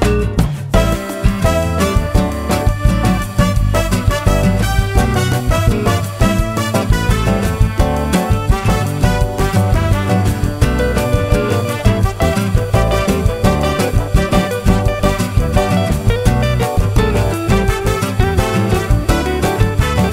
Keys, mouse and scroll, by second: 1.8 shift+click, 2.9 shift+click, 3.8 shift+click, 4.1-5.4 shift+drag, 5.7-7.1 shift+drag, 7.2 shift+click, 8.1 shift+click, 8.8-10.0 shift+drag, 10.1 shift+click, 11.4 shift+click, 12.3 shift+click, 12.8 shift+click, 13.5 shift+click, 13.9 shift+click, 14.6 shift+click, 15.0 shift+click, 15.9 shift+click, 16.2 shift+click, 16.9 shift+click, 18.7 shift+click, 19.0 shift+click, 19.7-20.1 shift+drag.